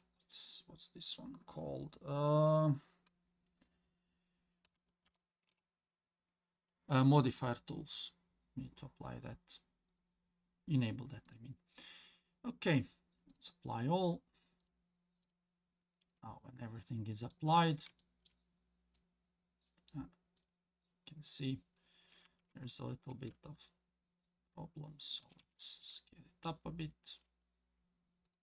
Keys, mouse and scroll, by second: 13.3 click, 14.6 click, 15.2 click, 16.2-17.3 middle drag, 17.5 scroll up 2, 18.0 shift+middle drag, 18.4-19.1 scroll up 3, 18.9-19.9 middle drag, 20.4 click, 22.4 Tab, 23.1 s, 25.8 Tab, 25.8-26.4 middle drag.